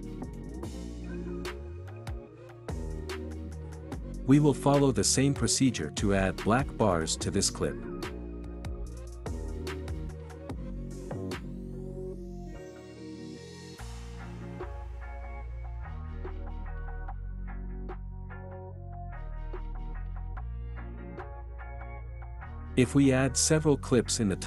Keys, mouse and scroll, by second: 4.6-6.2 drag, 6.5 click, 8.8 click, 12.6 click, 13.5 click, 17.9 click, 19.2 click, 21.2-22.3 drag, 22.9-24.4 drag.